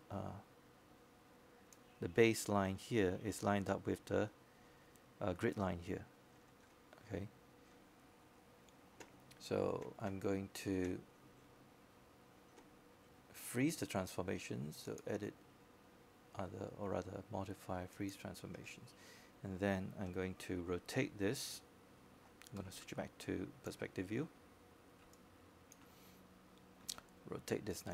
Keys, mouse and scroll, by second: 0.5 w, 1.3-4.6 drag, 4.6-8.6 scroll up 1, 22.6 middle click, 25.2 space, 25.2-27.6 drag.